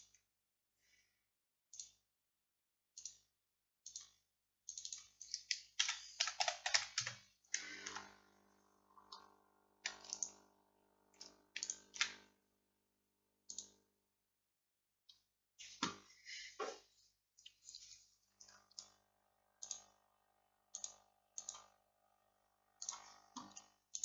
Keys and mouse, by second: 1.8-7.9 drag, 7.9 Tab, 9.0-10.2 drag, 13.6-21.6 drag, 23.7 click.